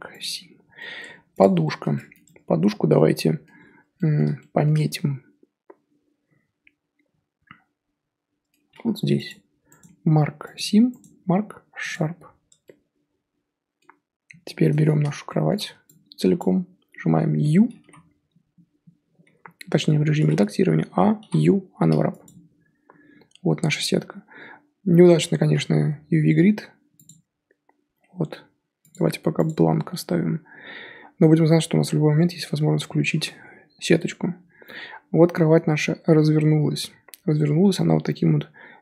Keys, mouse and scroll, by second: 0.7 middle click, 1.0 Tab, 1.4 click, 1.6-2.2 shift+middle drag, 2.2 Tab, 2.3-2.9 scroll up 3, 2.9 scroll down 1, 2.9 middle click, 3.5 scroll up 1, 3.9 middle click, 4.7 scroll up 1, 4.7-7.7 middle drag, 8.7 2, 9.3 alt+click, 10.5-12.2 right drag, 12.2 scroll down 4, 12.5 Tab, 12.6-14.4 middle drag, 14.4 scroll down 3, 14.7-16.4 middle drag, 16.4 click, 19.8 Tab, 20.2 a, 22.2 u, 25.8 n, 27.0 click, 28.8 click, 29.3 click.